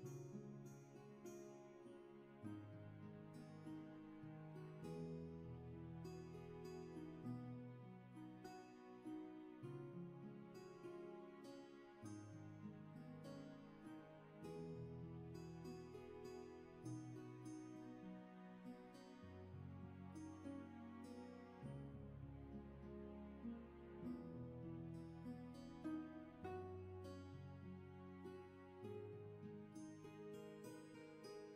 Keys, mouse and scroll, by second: 10.2 ctrl+z, 12.5 ctrl+z, 30.2 ctrl+z.